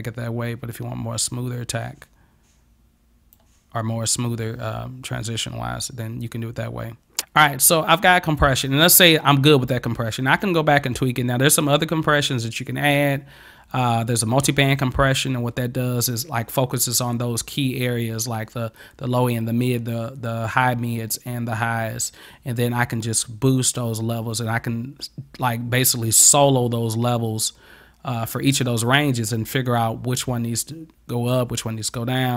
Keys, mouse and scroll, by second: 11.7 click.